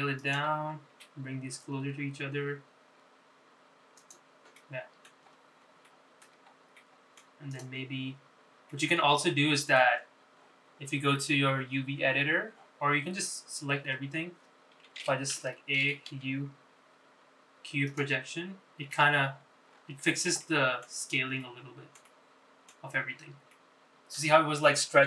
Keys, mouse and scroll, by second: 0.4 s, 2.3 g, 5.7 middle click, 6.4-7.0 scroll up 4, 7.0 shift+middle click, 7.6-7.9 scroll up 2, 7.9 middle click, 8.6 click, 9.4-9.8 scroll down 2, 9.8-10.9 middle drag, 15.0 Tab, 16.4 a, 17.4 u, 20.2 Tab, 20.8-21.4 scroll up 4, 21.5 shift+middle click, 22.6 middle click, 23.2 middle click, 24.0-24.6 scroll down 4, 24.6 middle click.